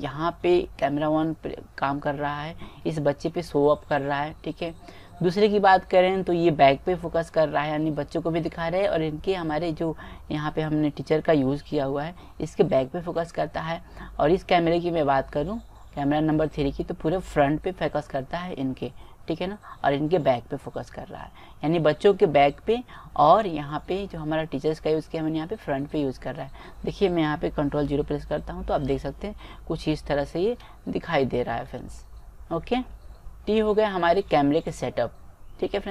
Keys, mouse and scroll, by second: 0.7-2.5 middle drag, 10.8-12.6 middle drag, 13.6 middle click, 14.8 middle click, 16.7 middle click, 17.5 middle click, 25.4-27.4 middle drag, 28.1 ctrl+KP_0, 31.2 middle click, 32.6-35.9 middle drag.